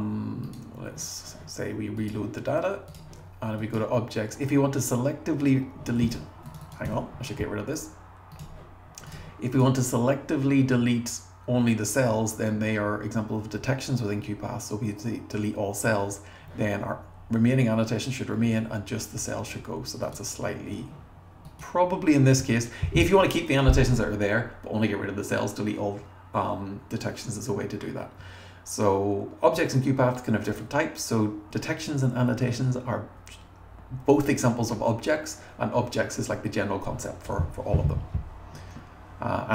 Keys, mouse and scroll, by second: 2.0 click, 2.9 click, 6.5 click, 6.7 click, 6.8 BackSpace, 8.4 click, 9.1 click, 21.5 click.